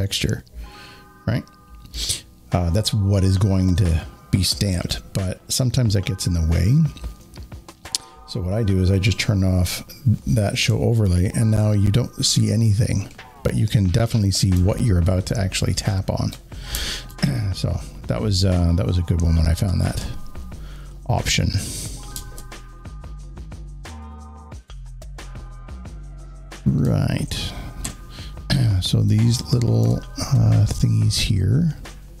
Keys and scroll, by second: 22.9 alt+space, 26.7 z, 26.8 z, 26.9 z, 29.7 alt+s.